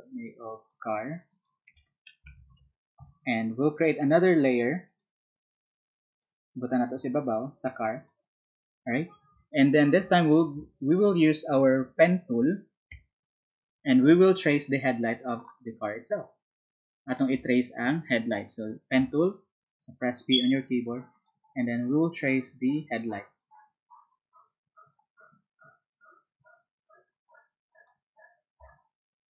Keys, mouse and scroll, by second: 0.4 alt+click, 1.1 alt+click, 1.3 alt+click, 2.0-3.0 typing, 4.8 click, 6.1-8.0 drag, 9.2 ctrl+click, 15.8 space, 20.3 p, 27.1-28.3 drag.